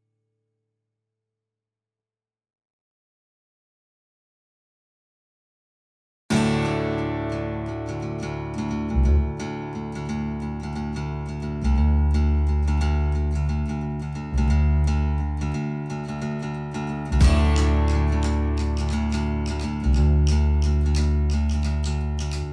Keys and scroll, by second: 14.7 Delete, 18.9 Delete, 20.4 Delete, 21.0 Delete.